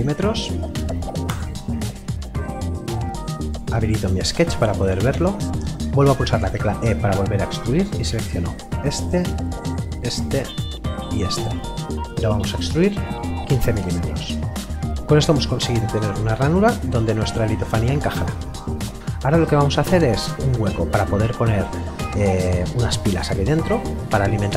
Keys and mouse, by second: 1.3 Return, 3.4 click, 6.4 e, 7.9 click, 13.0 KP_1, 13.1 KP_5, 15.0 Return, 19.0 middle click.